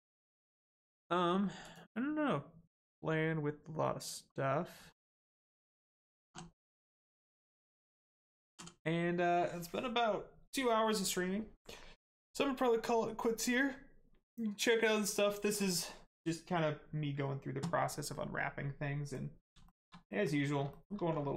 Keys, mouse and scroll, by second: 0.2 click, 2.6-3.1 scroll down 1, 4.7 scroll down 1, 6.9-8.9 scroll down 1, 19.6 shift+middle click, 20.0 middle click, 20.1 middle click, 20.4 scroll up 1, 20.7 shift+middle click, 21.1 scroll down 1.